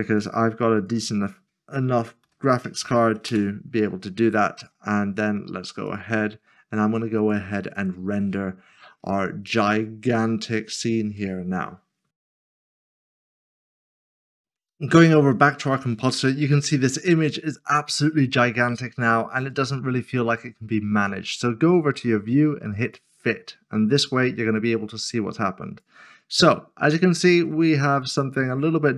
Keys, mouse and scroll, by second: 0.2 click, 1.6 s, 3.0 typing, 3.3 Return, 6.0 click, 10.2 scroll down 1, 15.7 click, 17.1 middle click, 19.1 click, 22.8 click, 27.8-28.3 scroll up 1, 28.3-28.9 scroll up 1.